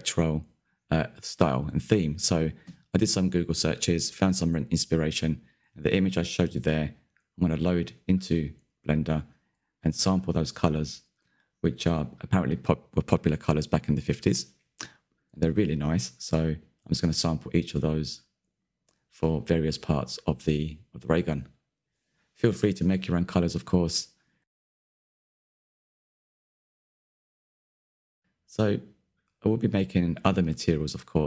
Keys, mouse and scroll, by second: 1.8-17.5 drag, 19.1 click, 19.5 middle click, 19.7 scroll down 1, 19.8 shift+middle click, 20.1 click, 20.4 click, 20.5-21.9 middle drag, 21.9 click, 22.4 middle click, 23.2 click, 23.7-26.4 middle drag, 26.4-26.8 scroll up 2, 27.3-31.2 shift+middle drag.